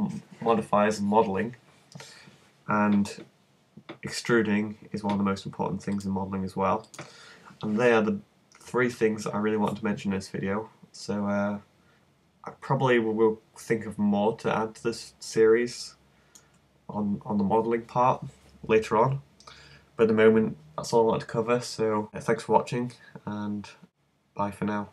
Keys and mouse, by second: 7.5 click, 9.0-12.2 middle drag.